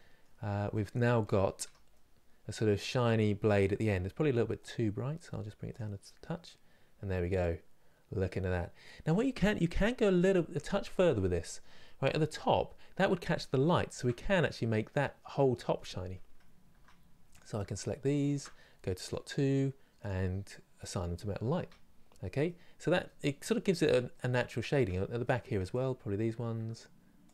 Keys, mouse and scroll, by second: 0.9 scroll down 3, 1.3 Tab, 1.6-5.3 middle drag, 5.3 click, 6.1 middle click, 7.1-9.8 middle drag, 9.8-10.1 scroll up 2, 10.6 middle click, 11.5 middle click, 13.3 shift+middle click, 13.9 scroll up 2, 14.6-16.4 middle drag, 16.4 Tab, 17.0 click, 17.9 shift+click, 19.6-21.2 drag, 21.2 Tab, 21.7 scroll down 2, 22.7-24.4 middle drag, 24.4 Tab, 24.9 middle click, 25.4 click, 26.9 shift+click.